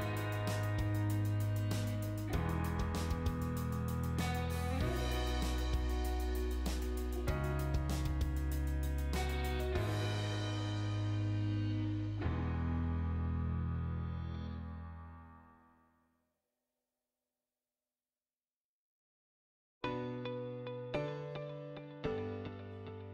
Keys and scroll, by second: 7.4-8.3 typing.